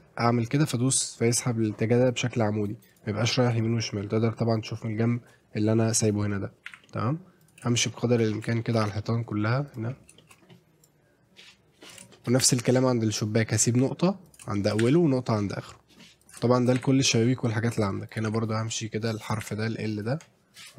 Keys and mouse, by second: 2.9 click, 3.6 shift+click, 6.7 e, 6.8 middle click, 7.4 click, 7.9 shift+middle click, 8.6 shift+middle click, 8.7 e, 8.8 e, 9.0 middle click, 9.7 click, 10.2 shift+middle click, 10.8-11.9 drag, 12.1 shift+middle click, 12.4 e, 12.5 middle click, 14.3 click, 14.6 shift+middle click, 14.9 middle click, 16.2 click, 16.5 shift+middle click, 16.8 e, 16.9 middle click, 18.1 click, 18.3 e, 18.4 middle click, 19.3 click, 19.4 e, 19.6 middle click.